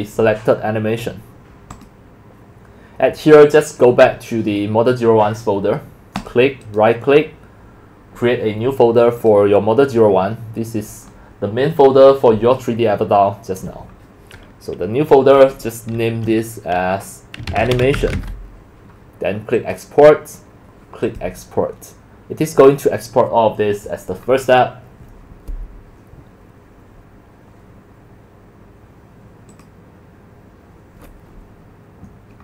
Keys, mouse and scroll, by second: 1.8 click, 6.2 click, 6.6 click, 9.2 click, 17.2-18.7 typing, 19.6 click, 25.6-26.1 drag, 29.5 click.